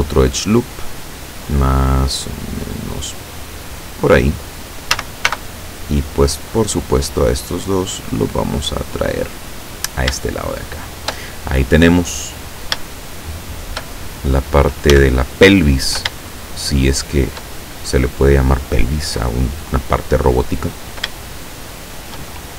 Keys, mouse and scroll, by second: 0.2 click, 3.9 click, 5.0 a, 5.3 b, 6.0 click, 7.2-9.2 drag, 9.6-10.0 scroll down 2, 10.2-11.3 shift+drag, 12.9 shift+click, 15.0 a, 16.2-17.4 shift+middle drag.